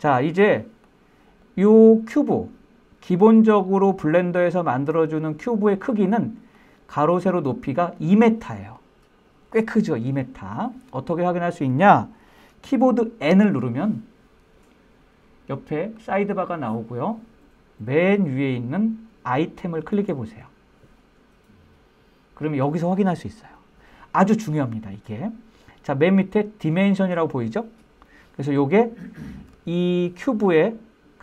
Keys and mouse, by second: 0.9-1.3 middle drag, 2.4 click, 2.9-6.1 middle drag, 8.1-9.2 drag, 14.8 n, 17.5 click.